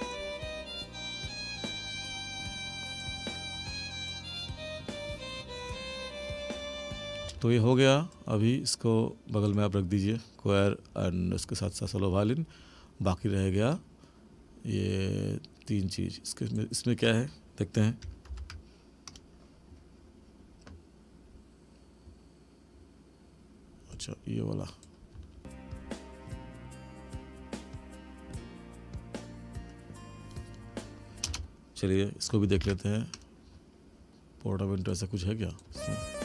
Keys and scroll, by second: 7.2 space, 18.3 ctrl+=, 25.1 space, 31.2 space, 32.6 ctrl+=, 35.7 space.